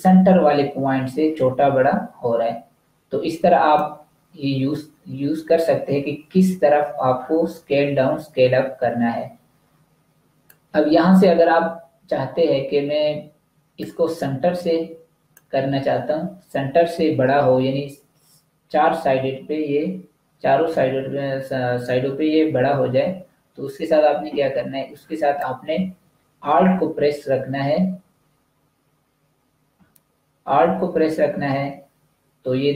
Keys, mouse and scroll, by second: 3.7 shift+click, 25.2 click.